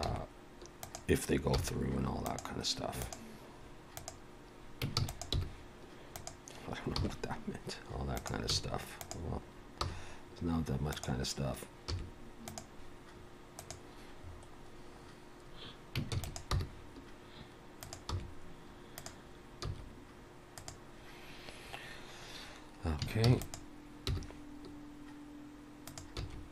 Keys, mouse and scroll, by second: 0.1 s, 1.5 r, 3.0 click, 4.0 click, 5.0 shift+d, 5.3 g, 7.0 r, 8.5 s, 9.8 g, 11.9 r, 14.2-14.6 scroll up 2, 15.1 scroll down 1, 15.5-16.0 scroll down 1, 16.2 shift+d, 16.5 g, 18.1 r, 19.7 s, 23.3 shift+d, 24.1 g, 26.2 s.